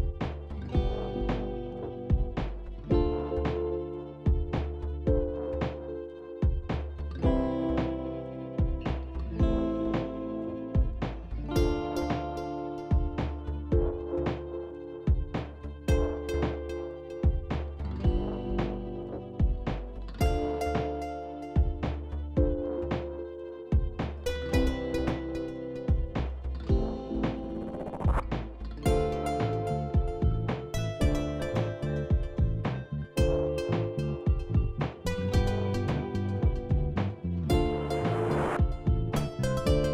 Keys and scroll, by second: 5.6 ctrl+c, 5.8 ctrl+c, 8.0 ctrl+v, 12.2 ctrl+a, 14.9-16.3 typing, 24.9 ctrl+a, 28.3-29.3 typing, 31.3 ctrl+a, 32.0-32.8 typing, 34.1 typing, 35.5 typing, 37.8 ctrl+a.